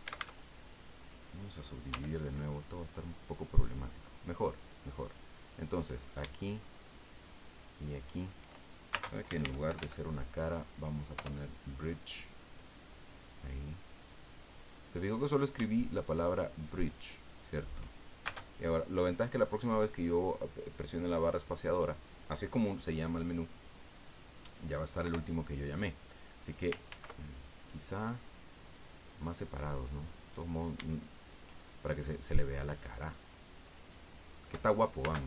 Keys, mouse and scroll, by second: 0.0 a, 1.9 w, 2.5 click, 4.8 right click, 7.5 shift+right click, 9.0-10.3 typing, 11.1 Return, 13.7 right click, 16.8 shift+right click, 18.2 shift+space, 25.0 Return, 26.9 ctrl+z, 30.1 right click, 32.7 shift+right click, 35.0 space.